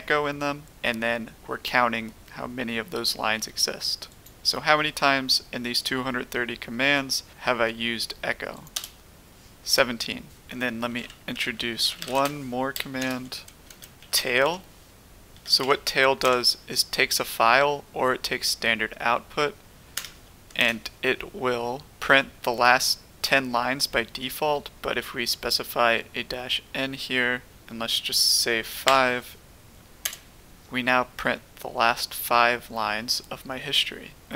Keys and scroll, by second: 8.7 Return, 10.7-16.2 typing, 19.9-20.5 typing, 30.0 Return, 30.0 typing.